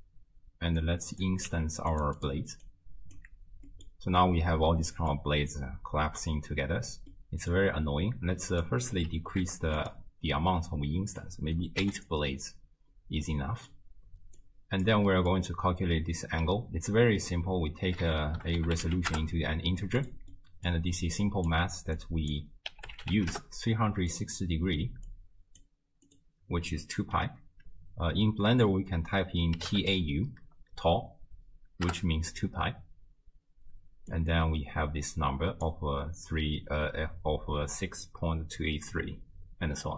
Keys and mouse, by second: 0.8 click, 1.5 g, 2.2 click, 2.6 alt+click, 3.7 middle click, 4.2-5.2 middle drag, 7.1 middle click, 8.5-9.8 drag, 11.1 click, 13.3 middle click, 14.4 click, 15.1 middle click, 16.9-20.1 drag, 20.4 middle click, 21.3 click, 22.0-24.3 drag, 25.1 click, 26.1-31.9 drag, 34.1-35.7 drag.